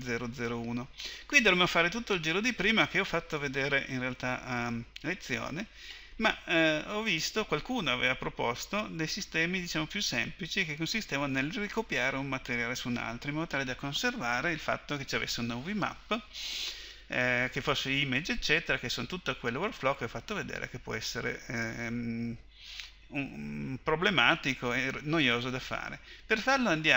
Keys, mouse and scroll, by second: 24.4-26.9 drag.